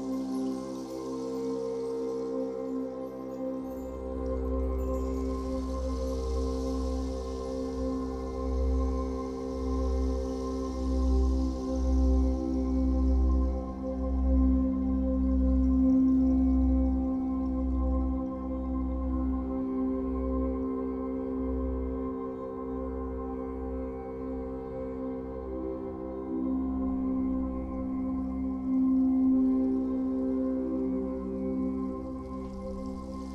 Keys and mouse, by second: 0.8 space, 1.4-3.5 drag, 3.3-4.6 typing, 4.5 click, 5.7-7.2 drag, 5.9 typing, 7.2 typing, 8.0-9.3 drag, 9.8-10.8 drag, 10.8-11.8 typing, 11.7 click, 12.9-13.8 drag, 14.4 typing, 14.9-15.4 drag, 15.6-16.5 drag, 16.5-17.3 typing, 17.5 click, 18.2 click, 19.3-20.9 typing, 19.9-21.3 drag, 24.6 space, 25.1-26.9 drag, 25.3 space, 26.9 space, 27.0-30.0 drag, 27.3 space, 30.6 space.